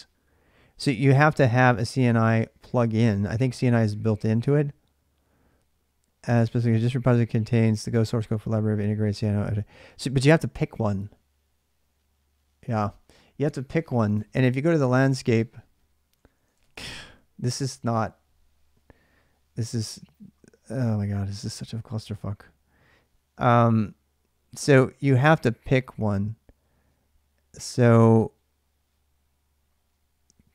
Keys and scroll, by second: 16.0-17.1 typing, 17.4 Return.